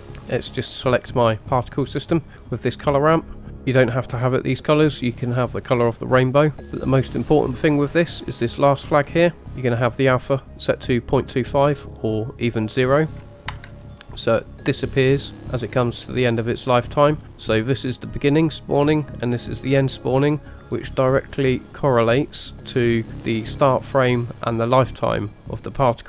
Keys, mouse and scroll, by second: 1.0 click, 2.3-3.0 scroll up 2, 3.0 middle click, 6.6 ctrl+z, 6.7 click, 8.2 click, 9.3 middle click, 9.5 click, 18.3 click, 19.4 click, 21.0 click, 22.7-23.1 scroll down 2.